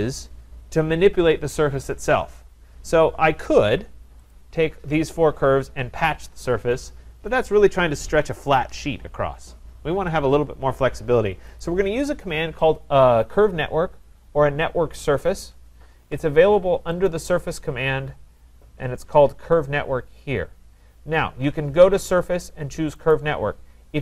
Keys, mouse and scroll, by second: 0.0-1.9 drag, 4.4-10.9 drag, 11.6-16.7 drag, 17.1-22.1 drag, 23.1-24.0 drag.